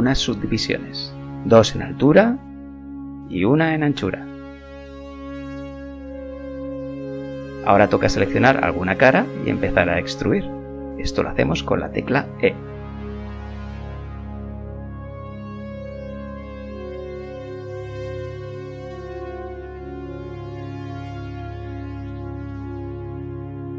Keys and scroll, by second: 1.1 Return, 11.7 KP_7, 18.7 e.